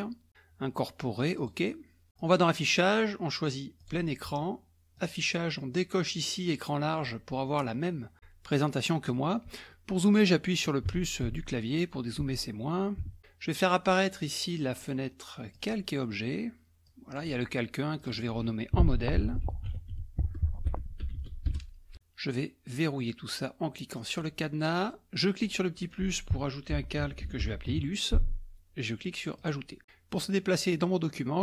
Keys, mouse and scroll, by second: 1.4 click, 2.2 click, 3.8 click, 4.0 click, 5.0 click, 8.1 click, 10.9 KP_Add, 11.3 KP_Add, 12.3 KP_Subtract, 13.0 KP_Add, 14.8 click, 15.6 click, 16.9 click, 18.0 click, 19.0-21.7 typing, 24.2 click, 25.4 click, 26.6-28.2 typing, 29.4 click.